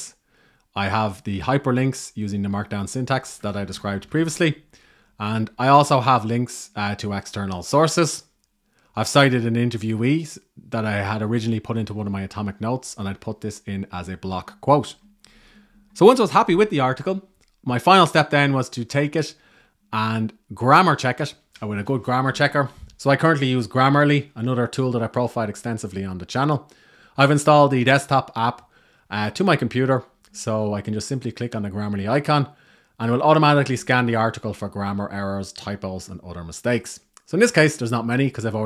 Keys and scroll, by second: 15.8 Left.